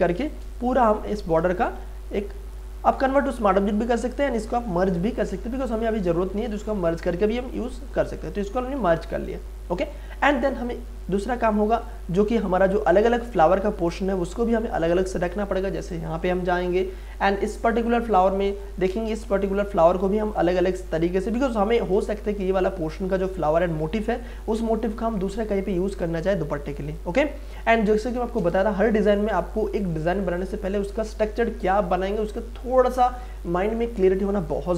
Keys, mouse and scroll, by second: 1.2 ctrl+z, 1.4 ctrl+space, 1.7 ctrl+click, 2.0 ctrl+space, 5.3 ctrl+e, 6.8 click, 8.8 space, 9.1-10.4 ctrl+drag, 10.5-15.7 ctrl+drag, 16.9-18.0 scroll up 1, 18.0 click, 19.2 space, 19.5 ctrl+click, 21.4 click, 24.2 ctrl+space, 24.5 ctrl+click, 24.8 ctrl+space, 26.5 ctrl+space, 27.8 click, 28.1 ctrl+space.